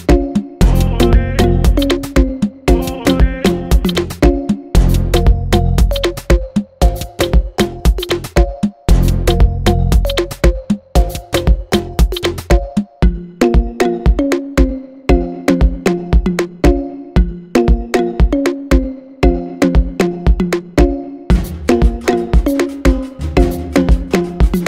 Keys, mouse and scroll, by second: 0.6 g, 1.1 Tab, 2.1 click, 2.5 g, 3.2 Tab, 4.3 scroll down 1, 5.5 Tab, 5.8 `, 6.7 alt+a, 7.3 `, 9.7-17.4 drag, 10.2 Tab, 17.8 KP_1, 20.9 Tab, 22.1 KP_1, 23.9-24.6 scroll up 1.